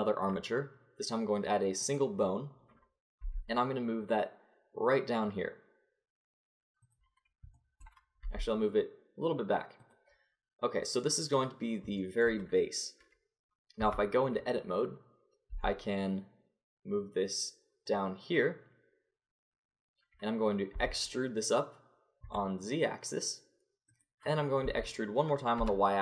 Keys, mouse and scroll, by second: 3.2 g, 7.6 click, 8.2 g, 13.8 Tab, 15.5 g, 20.7 e, 24.6 e.